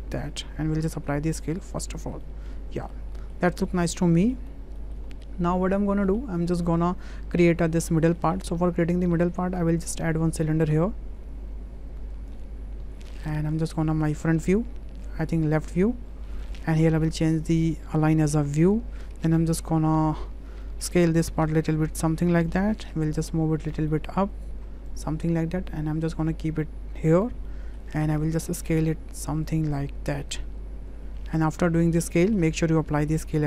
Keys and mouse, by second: 0.9 ctrl+a, 1.9 click, 2.2-2.9 drag, 3.2 shift+drag, 3.7-4.3 drag, 4.8 shift+click, 5.1-5.5 drag, 6.1 shift+middle click, 8.2 middle click, 8.7 shift+a, 17.2 click, 20.2-22.5 drag, 22.7 w, 23.3-23.7 drag, 24.0 shift+middle drag, 24.9-27.1 drag, 27.6 middle drag, 29.5-31.6 drag, 32.2 middle click, 33.1 w.